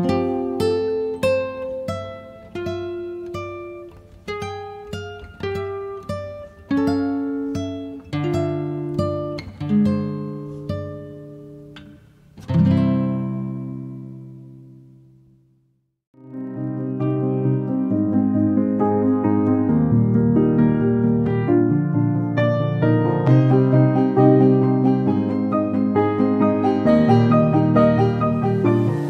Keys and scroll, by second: 0.0-0.9 typing, 2.0 KP_Decimal, 2.2 5, 4.2 5, 4.4 KP_Decimal, 4.6 3, 5.4 5.